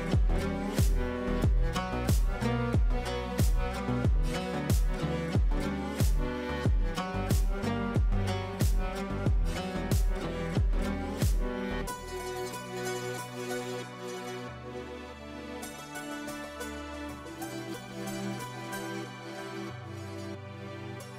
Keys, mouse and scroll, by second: 0.3 click, 1.2 ctrl+a, 1.7-2.2 typing, 3.4-8.7 typing, 8.8 ctrl+space, 11.5 click, 11.6-14.4 drag, 18.1-20.9 drag.